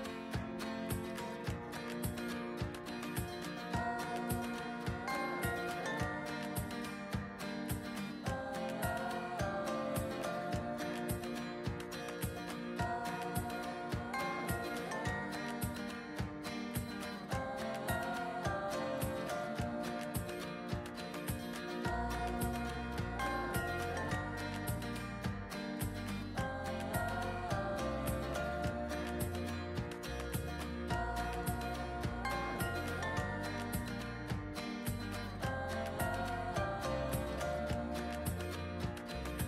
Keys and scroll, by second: 15.7 ctrl+t.